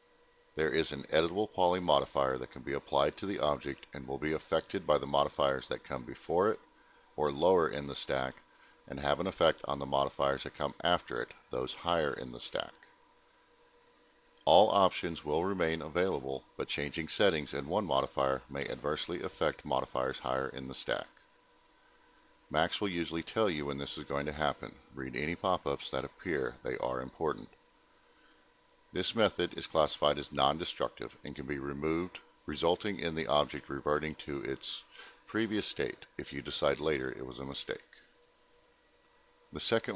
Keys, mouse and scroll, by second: 1.9 click, 4.3 click, 5.0 click, 5.1 click, 5.6 click, 6.3 click, 6.8 click, 8.5 click, 14.0 click, 16.3 click, 18.1 click, 20.2 click, 30.8 click.